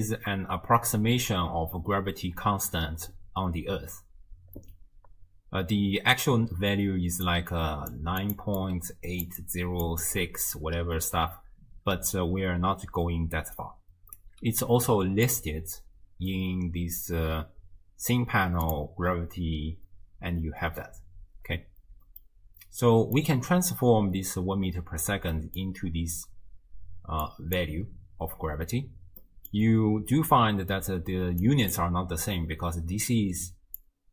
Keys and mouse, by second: 6.6-10.7 typing, 7.3 click, 8.2 click, 8.6 click, 9.4 click, 10.1 click, 12.7-13.6 d, 13.6 click, 14.2 d, 14.3 d, 15.3 click, 22.2-23.2 middle drag, 25.3 middle click, 25.7-27.1 d, 27.3 click, 27.3-27.8 d, 29.2 click, 29.5 middle click, 31.1-34.1 d, 31.5 click, 33.8-34.1 drag.